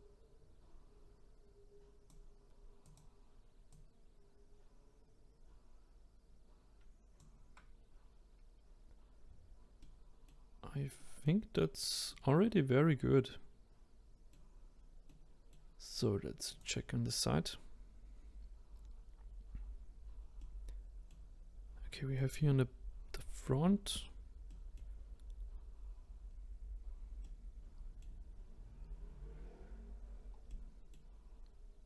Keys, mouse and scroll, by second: 2.8 click, 3.7 click, 8.7-9.3 scroll down 2, 9.8 middle click, 10.5-10.9 scroll down 1, 10.9 middle click, 11.4-12.0 scroll up 2, 12.0-14.7 middle drag, 14.7-15.0 scroll down 2, 15.0-16.5 middle drag, 16.5 click, 16.9-18.7 scroll up 2, 18.7 scroll down 2, 20.4-25.5 middle drag, 25.5-26.3 scroll down 1, 26.3 scroll down 1, 26.7-27.2 scroll up 1, 27.2-29.2 middle drag, 29.2 scroll down 1, 30.1-30.5 scroll down 1, 30.5-31.8 middle drag.